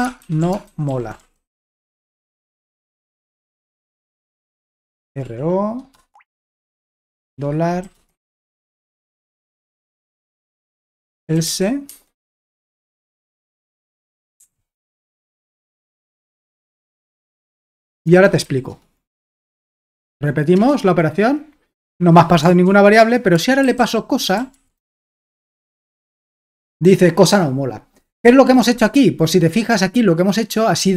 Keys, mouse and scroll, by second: 0.0-1.6 typing, 3.1 Escape, 3.3-8.6 typing, 8.9 Return, 10.4-11.9 typing, 14.1-18.7 typing, 16.0 Escape, 19.4 alt+Tab, 22.7 ctrl+p, 23.4-26.3 typing.